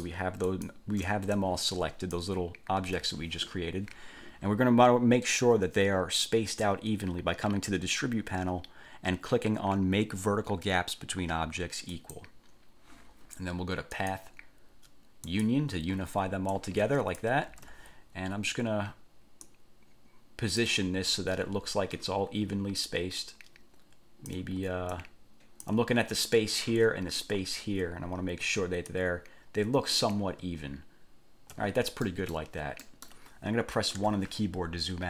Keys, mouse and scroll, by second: 0.0 shift+click, 0.6 shift+click, 1.5-2.5 shift+drag, 3.0 ctrl+z, 12.1 click, 14.2 click, 15.4 click, 16.7 click, 17.7 ctrl+z, 19.6-21.0 ctrl+drag, 23.0-24.7 ctrl+drag, 25.1 ctrl+click, 29.0-30.4 ctrl+drag, 32.2 click, 33.0 click, 34.2 1.